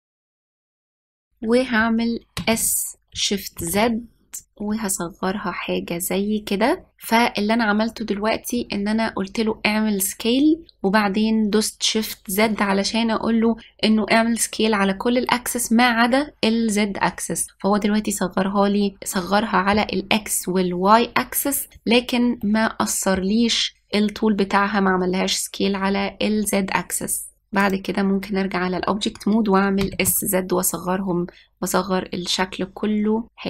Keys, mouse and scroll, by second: 0.0 middle click, 0.2 shift+click, 0.4 middle click, 0.5 shift+click, 0.7 shift+click, 0.9 middle click, 1.2 middle click, 3.0 s, 19.1-19.6 middle drag, 23.2-26.0 middle drag, 27.7-30.5 drag, 30.5 s.